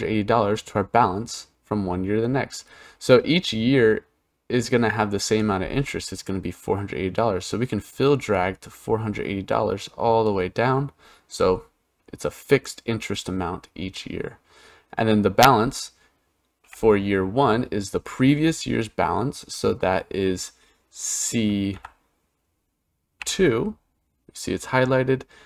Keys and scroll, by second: 16.5 =, 21.5 c, 23.0 2.